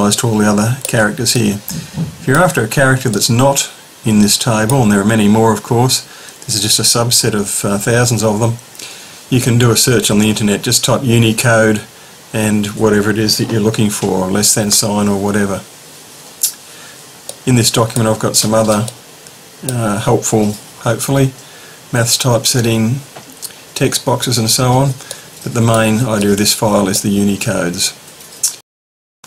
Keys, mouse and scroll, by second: 0.1 middle click, 17.3-20.1 middle drag, 25.1-26.9 middle drag, 28.6 click.